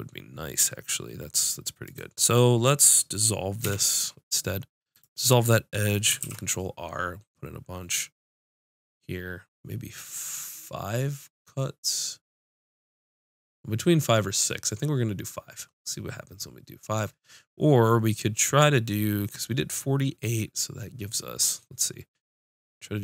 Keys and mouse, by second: 1.9-3.6 right drag, 3.6 x, 6.2 ctrl+r.